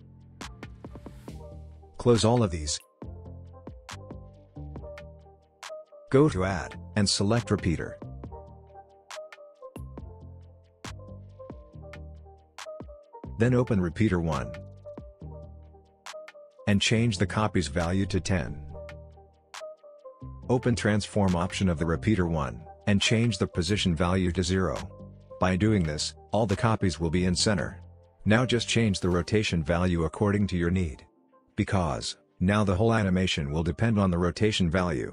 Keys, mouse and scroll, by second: 0.7 ctrl+z, 1.7 click, 2.2-2.9 scroll up 1, 4.5 click, 11.1-12.9 scroll up 2, 14.3 click, 16.7 click, 18.5 Return, 21.8 click, 24.4 click, 26.0 Return, 28.4-34.8 drag, 34.9-35.1 scroll down 1.